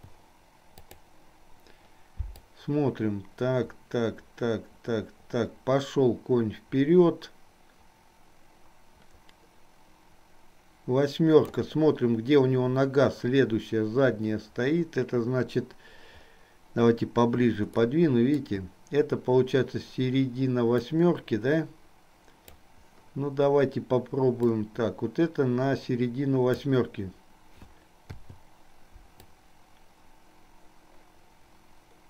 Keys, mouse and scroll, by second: 1.1 click, 2.6-11.7 drag, 18.2 shift+middle click, 21.1-22.8 drag, 24.7-27.1 drag, 29.4-32.0 drag.